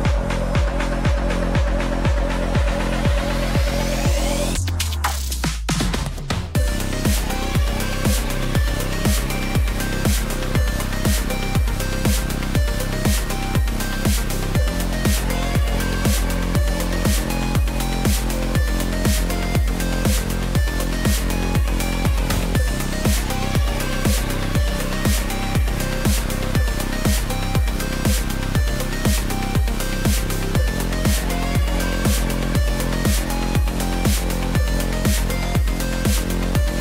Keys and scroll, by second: 17.7 ctrl+t.